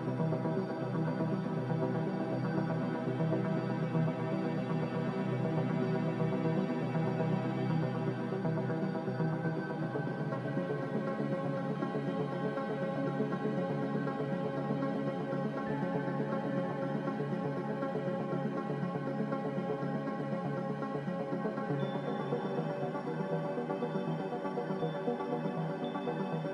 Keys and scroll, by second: 7.2 z, 9.2 1, 9.7 Return, 11.8 ctrl+z, 12.1 ctrl+z, 14.7-15.2 typing, 17.5 b.